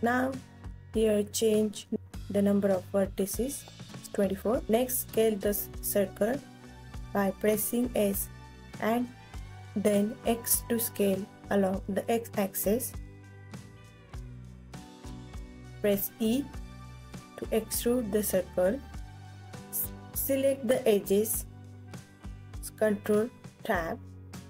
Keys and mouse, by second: 0.6-2.4 drag, 4.5 s, 7.9-10.5 drag, 11.9 s, 12.8 click, 13.5 Tab, 14.7 e, 21.9 ctrl+Tab, 22.3 ctrl+s, 23.5 Tab, 24.3 a.